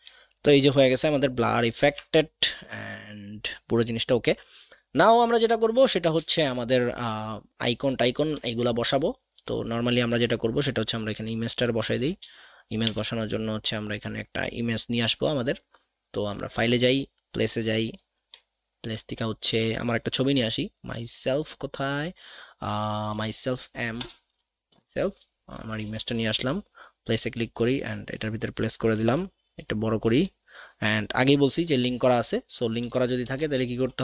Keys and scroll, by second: 12.8 v, 24.1 m, 24.7 Return, 33.2 ctrl+shift+[, 33.7 ].